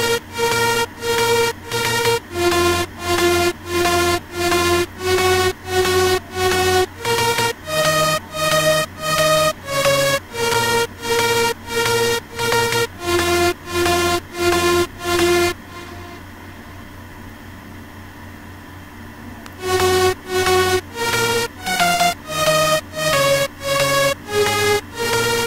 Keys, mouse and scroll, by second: 2.6 Escape, 17.7 F1, 25.3 click.